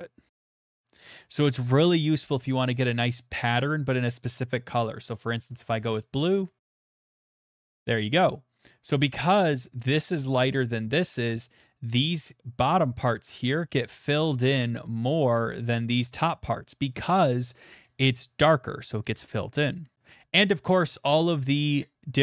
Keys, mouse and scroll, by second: 2.9 middle click, 4.2 middle click, 4.3 click, 4.8 middle click, 5.2 middle click, 5.7 shift+middle click, 6.2 click, 6.2 shift+middle click, 6.5 click, 6.7 click, 6.9 click, 7.1 click, 7.7 middle click, 19.9 click, 20.9 click.